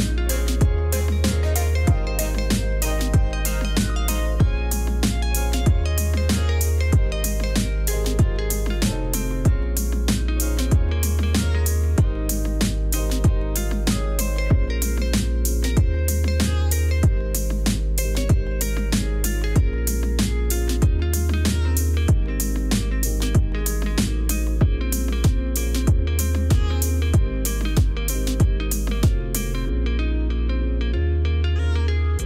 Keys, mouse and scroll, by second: 1.0 ctrl+r, 1.3 ctrl+r, 1.5 v, 2.6 Return, 8.0 [, 9.1 ctrl+z, 9.3 [, 10.0 Return, 11.1 ctrl+z, 11.8 ctrl+z, 12.1 ctrl+z, 14.5 ctrl+z, 16.5 ], 22.9 e, 24.5 ], 28.7 ctrl+alt+middle click, 28.7-29.5 scroll up 4, 29.3 ctrl+alt+middle click, 31.1 v, 31.5 ctrl+click.